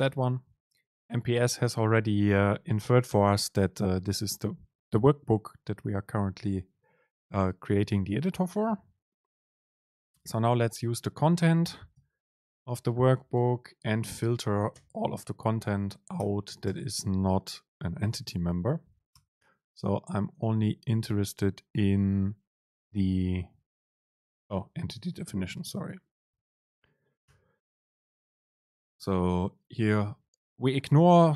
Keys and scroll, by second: 0.0 Left, 0.3 ctrl+shift+super+t, 10.9 super+space, 14.1 BackSpace, 14.9 super+space, 19.6 Left, 24.9 super+space.